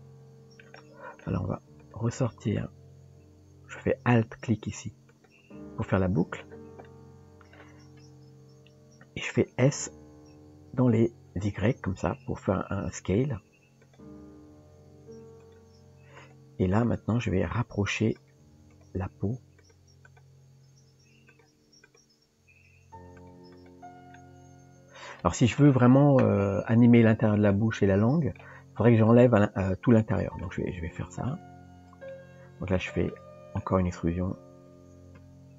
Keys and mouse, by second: 0.8 middle click, 1.8 click, 5.1 alt+click, 6.9 middle click, 8.5 KP_3, 9.7 s, 14.3 r, 16.2 click, 16.7 click, 18.7 click, 19.1 g, 20.1 click, 23.5 click, 24.1-25.7 middle drag, 27.5 middle click, 30.0 middle click, 31.3 ctrl+shift+click, 32.1 middle click, 33.1 middle click, 34.9 e.